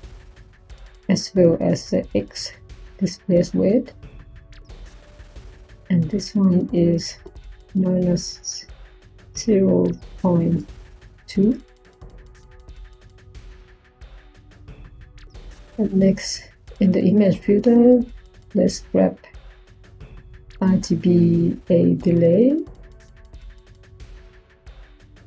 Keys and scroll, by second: 4.4 0, 7.6 -, 9.1-10.9 typing, 11.5 Return.